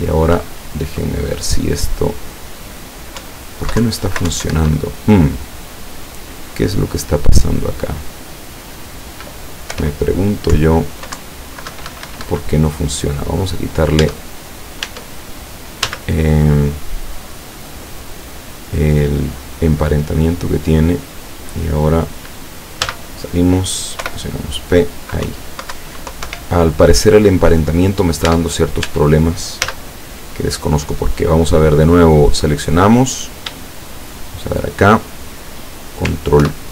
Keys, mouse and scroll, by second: 0.4 Up, 3.3 Up, 3.9 Down, 4.4 Up, 4.6 Escape, 6.4 right click, 9.8 p, 10.6 Up, 11.2 Down, 11.8 Escape, 14.0 Tab, 14.9 Tab, 15.9 z, 16.6 right click, 17.6 right click, 18.0 right click, 18.5 right click, 19.0 right click, 20.5 click, 22.9 z, 24.1 p, 25.3 Up, 25.8 Down, 26.3 Escape, 28.3 Tab, 29.7 z, 34.1 shift+right click, 36.4 ctrl+p.